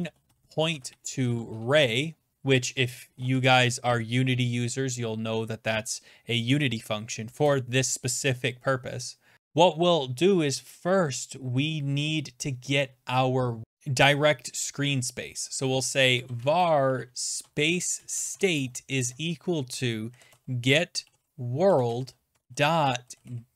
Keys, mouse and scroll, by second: 0.0-1.8 typing, 2.9-3.6 typing, 7.0-7.8 typing, 15.9-23.5 typing.